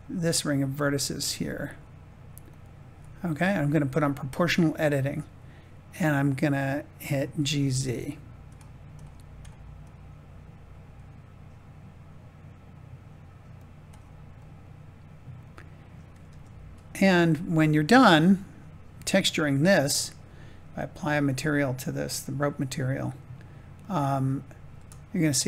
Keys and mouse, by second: 7.3 g, 7.5 z, 13.5 click, 14.3-15.8 middle drag, 16.2 Tab, 17.0 Tab, 21.7 click, 22.7-23.8 drag.